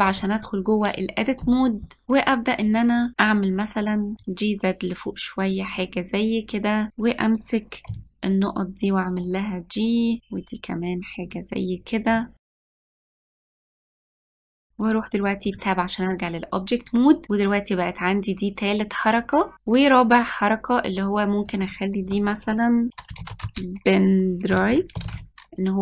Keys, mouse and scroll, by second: 0.2 Tab, 2.0 click, 4.1 g, 6.9 click, 8.0 g, 12.2 middle click, 12.5 click, 12.5 g, 12.8 middle click, 13.9 click, 14.2 middle click, 15.6 Tab, 17.2-19.5 drag, 21.6 click, 21.7-23.9 drag.